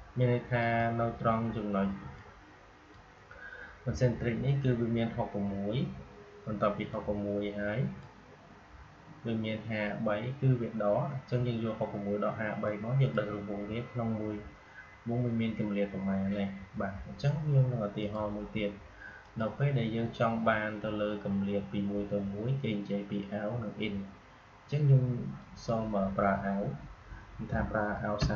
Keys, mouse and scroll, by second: 6.8-10.4 drag, 12.6-15.5 drag, 17.9 click, 25.3 click.